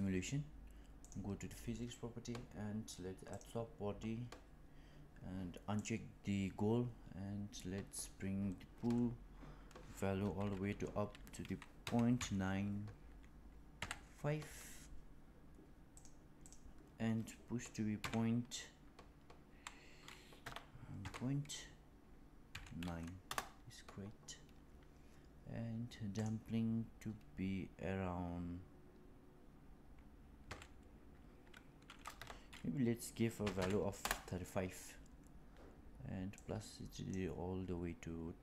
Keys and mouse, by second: 3.3 click, 5.7 click, 7.8-15.9 drag, 16.4-24.9 drag, 26.1-35.6 drag, 36.2 click.